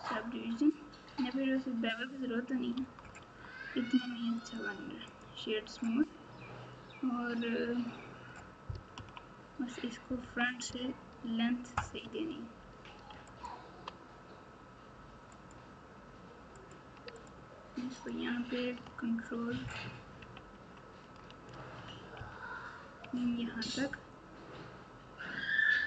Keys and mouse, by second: 2.7 Tab, 3.2 Tab, 4.3 right click, 8.9 KP_3, 10.2 KP_1, 12.0 Tab, 13.3 alt+click, 15.3 click, 16.5 click, 17.2 click, 20.1 KP_1, 22.1 ctrl+KP_3.